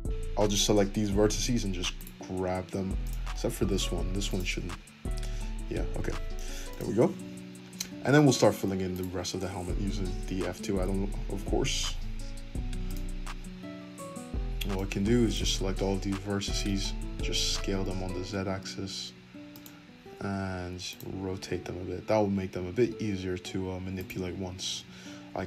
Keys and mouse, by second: 1.3 g, 2.3 g, 4.2 click, 5.2-8.0 drag, 5.4 g, 7.2 Tab, 8.0 Tab, 8.0 shift+middle click, 8.9 click, 9.8-11.3 middle drag, 9.8 f, 11.6-14.1 shift+middle drag, 13.0 alt+z, 13.0 r, 14.1-19.6 drag, 16.4 s, 19.6-25.4 middle drag, 20.2 r, 21.4 g.